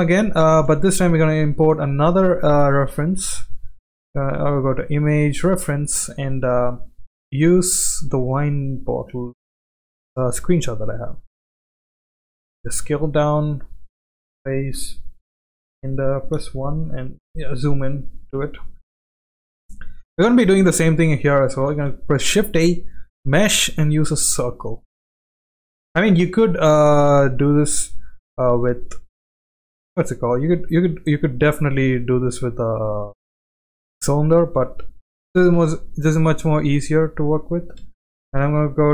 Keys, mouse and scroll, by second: 0.3 shift+middle click, 1.0 shift+a, 11.8 s, 12.7 g, 14.7 KP_1, 16.3 KP_1, 17.6 shift+middle drag, 18.5 shift+middle drag, 19.5 click, 21.7 shift+a, 25.5 s, 28.9 s, 30.5 click, 30.8 g, 32.1 g, 34.5 click, 35.1-35.7 middle drag, 36.1-36.4 shift+middle drag, 37.8 Tab.